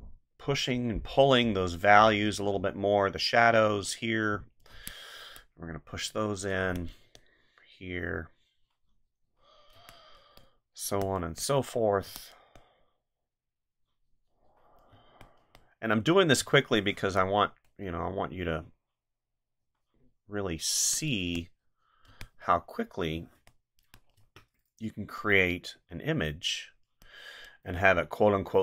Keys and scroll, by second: 4.7 space, 6.6 space, 9.7 space, 14.9 space, 16.4 space, 20.8 space, 22.1 space.